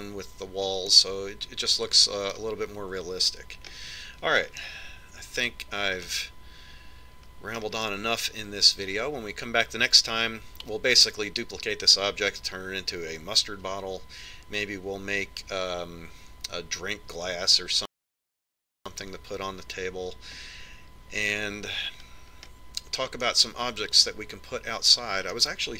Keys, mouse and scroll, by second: 2.8-4.6 middle drag, 5.6 middle click, 6.5-9.9 middle drag, 23.2-25.7 middle drag.